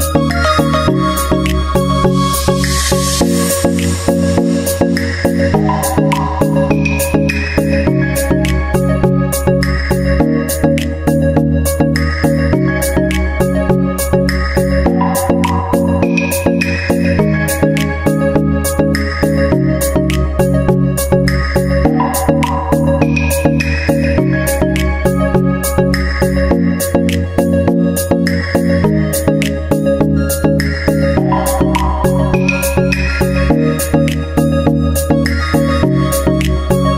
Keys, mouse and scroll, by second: 0.0 click, 0.4-2.7 drag, 3.2-4.3 drag, 3.9 d, 4.9 shift+d, 6.3-11.1 drag, 18.0 KP_Decimal, 20.2 d, 20.9 shift+d, 24.9-25.9 drag, 25.9-27.7 middle drag, 27.1 d, 28.5 d, 32.2-33.8 drag, 34.2-35.3 drag, 35.3-36.5 drag, 35.9 ctrl+z.